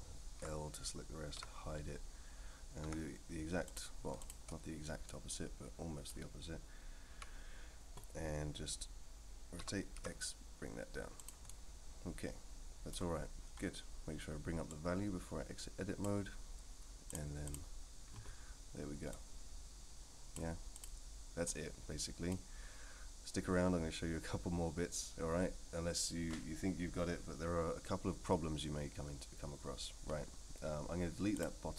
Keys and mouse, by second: 0.4 l, 1.4 h, 2.8 KP_1, 3.6 click, 4.2 shift+click, 5.1-6.1 middle drag, 7.1 KP_3, 9.6 r, 11.5-12.9 middle drag, 14.7-16.0 drag, 17.1-17.5 drag, 19.1-20.3 drag, 20.7 click, 21.5 click, 31.3 click.